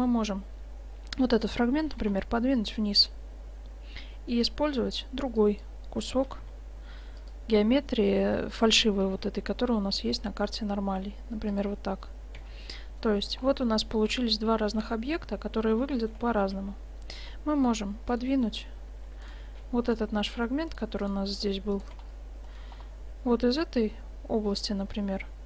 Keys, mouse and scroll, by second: 1.9 g, 6.3 g, 7.6-9.9 drag, 9.1 s, 12.5 Tab, 12.8-14.1 middle drag, 14.8 shift+z, 16.5 shift+z, 17.2 Tab, 18.1-19.5 right drag, 19.5 click, 20.4-23.6 right drag, 22.5-23.6 drag, 23.6-25.4 middle drag.